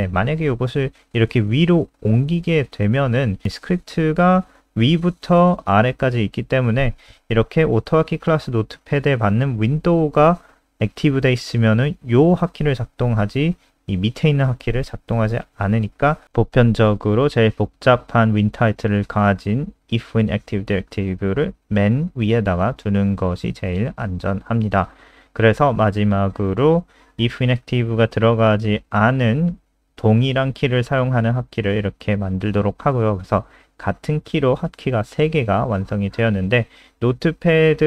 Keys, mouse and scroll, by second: 0.0 ctrl+x, 0.4 click, 0.9 Return, 1.0 Return, 1.2 Up, 1.6 ctrl+v, 6.9 click, 15.8 ctrl+z, 16.1 click, 16.8 ctrl+v, 17.3 click, 17.8 BackSpace, 17.9 BackSpace, 18.3 ctrl+s, 19.4 click, 25.1 scroll down 1, 26.5 ctrl+c, 26.6 click, 27.0 Return, 27.2 Return, 27.4 ctrl+v, 27.5 ctrl+s, 28.2 click, 34.7-37.6 typing.